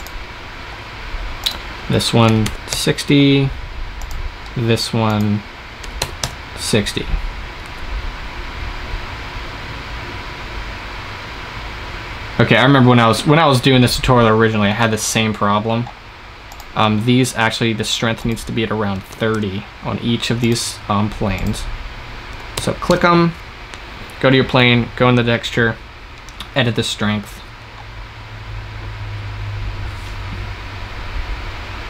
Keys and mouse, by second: 7.5 shift+z, 15.4 shift+z, 18.1-27.2 drag, 27.2 shift+z.